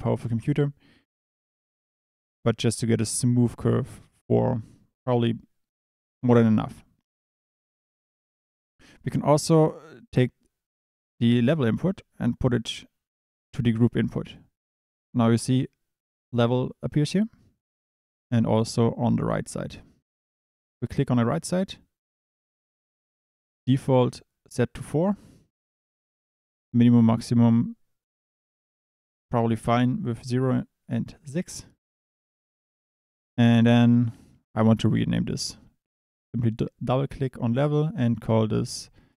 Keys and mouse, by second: 1.5 click, 9.8 click, 20.4 click, 36.4-39.1 drag.